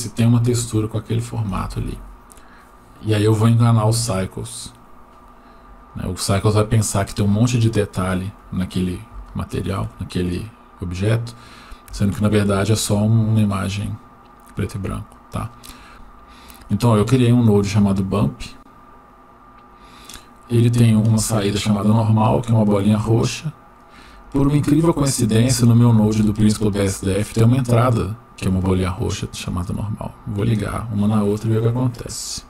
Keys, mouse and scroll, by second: 6.6 click, 8.6-9.1 scroll up 1, 9.3 shift+middle click, 10.3 click, 10.9 click, 12.2 shift+middle click, 13.2 click, 13.7 click, 15.3 click, 16.7 click, 17.3-17.7 drag, 18.0-19.1 scroll up 2, 19.1-19.7 drag, 21.5-22.9 drag, 23.7-29.5 drag.